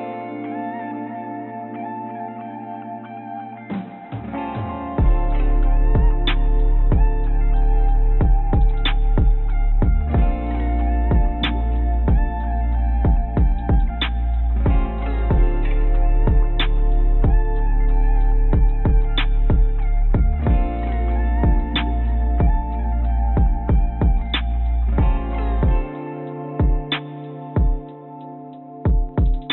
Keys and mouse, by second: 1.0 click, 2.1 g, 7.3 s, 9.6 g, 12.3 click, 13.5-15.6 drag, 16.1 Tab, 17.8-19.0 drag, 20.2 click, 21.1 click, 21.7-22.7 drag, 23.3 click, 24.7 click, 27.9 ctrl+s.